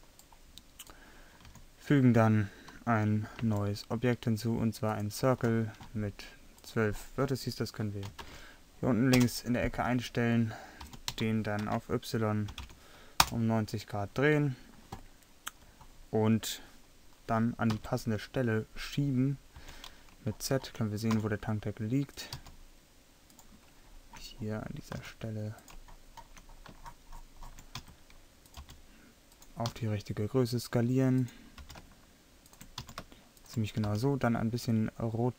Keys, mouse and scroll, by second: 1.5 a, 3.4 shift+a, 10.9 r, 17.8 KP_3, 19.6 z, 21.2 s, 22.4 g, 25.1 s, 27.8 s, 28.6 g, 29.7 s, 31.6 g, 32.3 click, 32.9 s, 33.9 r, 34.7-35.3 drag.